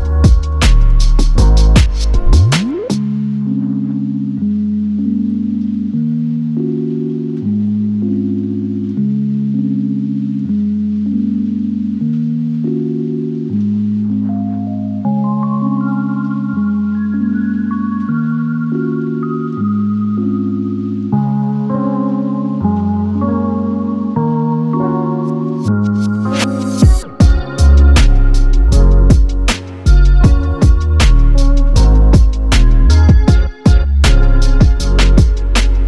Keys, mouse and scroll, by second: 1.2 r, 3.8 4, 6.5 click, 8.7 click, 14.1 click, 20.0 0, 20.9 click, 23.8 ctrl+d, 25.5 r, 26.1 click, 26.7-27.3 typing, 28.4 click, 30.2 click, 33.3 click, 34.7-35.8 alt+scroll up 2.